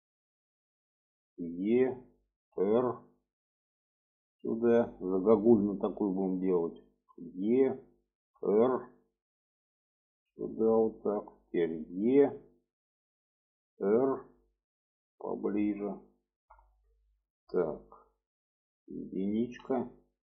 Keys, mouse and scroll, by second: 1.3 e, 2.5 r, 4.0-5.1 drag, 5.4 shift+middle click, 6.2 shift+middle click, 7.1 e, 8.3 r, 9.8-11.1 drag, 11.9 e, 13.2 r, 15.1-16.4 drag, 16.8 shift+middle click, 19.6 1, 20.0 click.